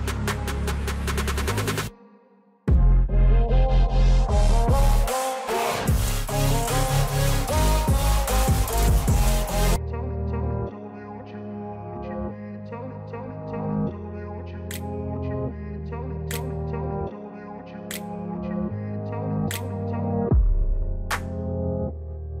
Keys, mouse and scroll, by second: 1.6-8.3 drag, 8.3 alt+scroll down 1, 9.6 click, 9.9 alt+scroll down 1, 10.5 scroll up 2, 11.2 scroll down 1, 12.6-16.4 drag, 18.0-19.6 drag, 20.8-22.4 shift+drag.